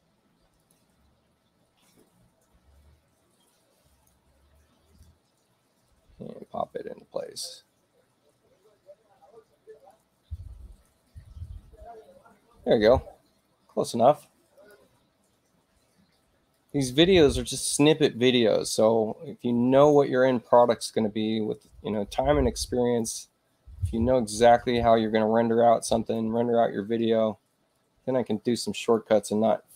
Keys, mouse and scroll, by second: 0.0 space, 0.5 click, 1.9-4.0 drag, 5.8-7.3 ctrl+drag, 9.7 click, 14.5 click, 16.5 click, 17.8 ctrl+click, 21.9-22.9 drag, 24.7-26.1 drag, 27.7-28.9 ctrl+drag.